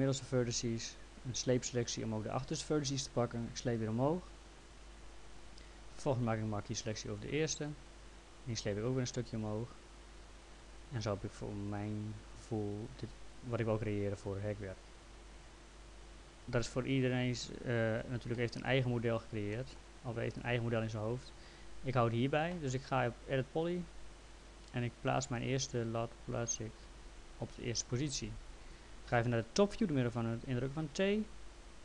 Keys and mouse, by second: 0.1 click, 1.5 click, 3.6 click, 6.0 click, 7.7 click, 12.9 click, 14.2 click, 18.4 middle click, 19.5 middle click, 23.6 click, 25.4 click.